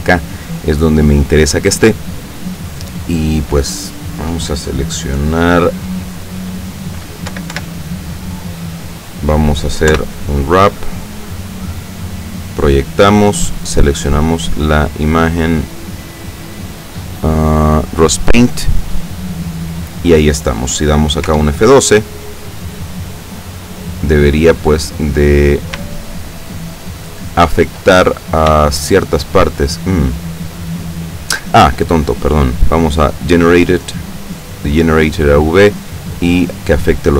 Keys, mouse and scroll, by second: 6.1 scroll down 1, 7.4 l, 10.0 u, 10.9 click, 12.2 click, 14.1 click, 18.1 click, 18.9-19.2 scroll down 1, 21.4 F12, 25.2-25.7 scroll down 2, 26.1-27.9 shift+middle drag, 28.1-28.5 shift+scroll up 3, 28.7 shift+middle click, 32.1-32.7 scroll down 4, 33.3 click, 34.4 click, 35.1-35.5 scroll down 1, 36.5 click.